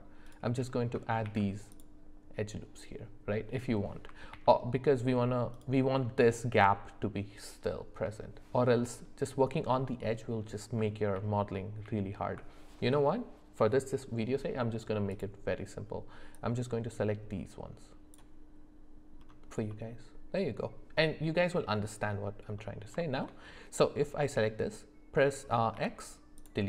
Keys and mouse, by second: 11.1 ctrl+z, 15.1 click, 16.3-18.1 drag, 19.7-21.9 middle drag, 22.6 middle click, 23.0 shift+middle click.